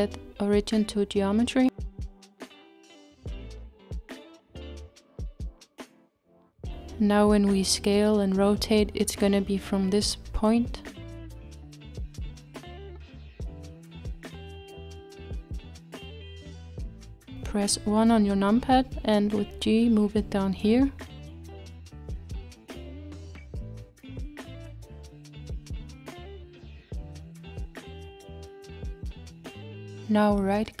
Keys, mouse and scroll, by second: 3.6-4.4 scroll down 3, 4.4-5.7 middle drag, 5.7-6.6 scroll up 1, 6.6 s, 14.6 s, 16.2 KP_1, 17.6-18.7 scroll up 2, 18.7 g, 29.5-30.8 shift+middle drag.